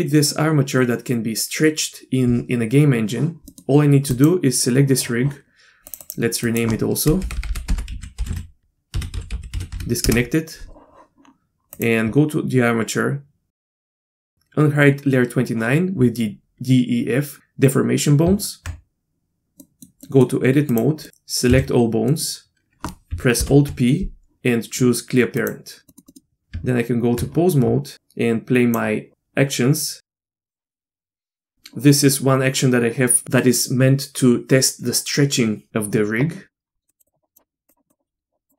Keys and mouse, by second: 3.5 middle click, 5.9 click, 6.0-10.6 drag, 7.3 BackSpace, 7.5 BackSpace, 8.6 n, 11.7 click, 13.8 click, 18.6 Tab, 19.6 middle click, 20.0 middle click, 20.7 click, 21.5 a, 22.1 middle click, 23.4 alt+p, 25.9 middle click, 26.1 middle click, 26.8 Tab, 27.9 click, 29.1 click, 30.6 middle click, 30.8 middle click, 33.1 middle click, 36.9 click, 37.1 click, 37.7 click, 37.9 click.